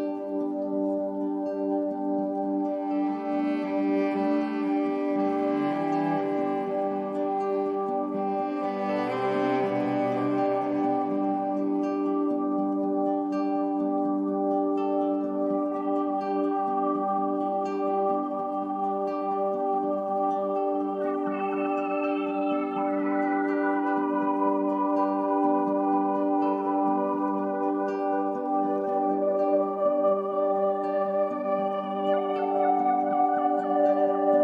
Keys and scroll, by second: 2.7 Down, 4.7 Down, 6.1 super+c, 7.9 super+f, 10.1 shift+Left, 11.6 shift+Right, 18.4 i.